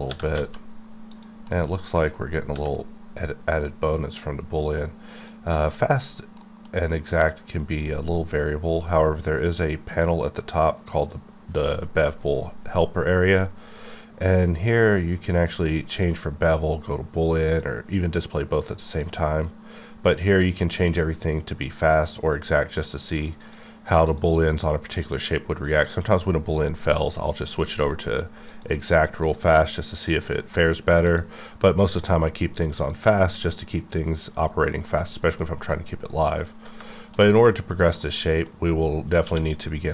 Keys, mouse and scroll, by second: 0.1 g, 0.4 z, 1.1 click, 1.5 middle click, 2.0 scroll down 2, 2.5 h, 2.6 h, 2.8 middle click, 5.5 shift+click, 5.6 shift+middle click, 5.9-6.4 scroll up 2, 6.4 middle click, 7.0-8.7 scroll down 1, 8.7 click, 9.9 click, 15.9 click, 16.4 click, 17.5 click, 18.9 click, 21.0 click, 22.0 click, 23.0 click, 23.4 click, 24.1 click, 24.7 click, 25.1 click, 25.6 click, 27.0 click, 27.5 click, 28.5 click, 29.4 click, 30.1 click, 31.1 click, 33.8 click, 33.9 click, 36.0 middle click, 37.2-38.0 scroll down 2, 38.3 middle click, 39.2 q.